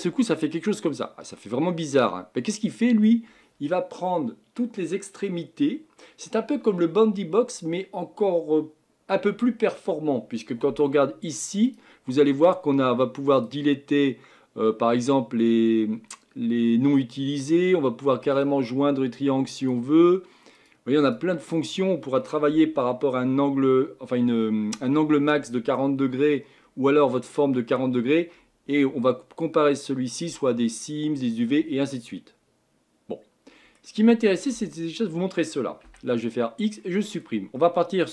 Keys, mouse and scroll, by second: 11.7-13.4 drag, 18.3 click, 19.6 click, 20.6 click, 21.0 click, 31.9-33.9 middle drag, 33.9-34.5 scroll up 1, 34.5 Tab, 35.2-35.7 scroll down 1, 35.8 x, 36.8-38.1 middle drag.